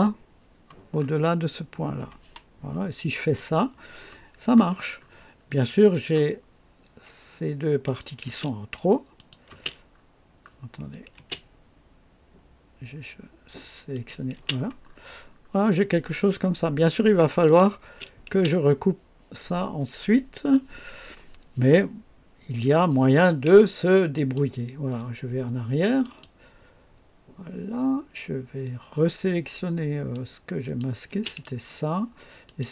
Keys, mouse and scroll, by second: 0.9 scroll up 2, 3.3 click, 4.9 scroll up 2, 5.4 right click, 7.8 click, 8.2 space, 9.1 click, 9.4 space, 9.9 scroll down 1, 11.1 typing, 13.9 click, 14.3 typing, 14.8-15.4 scroll down 2, 15.7-16.5 right drag, 17.4 click, 17.8-18.3 typing, 24.1 click, 26.0 click, 30.5 click, 31.0 space, 32.4 click.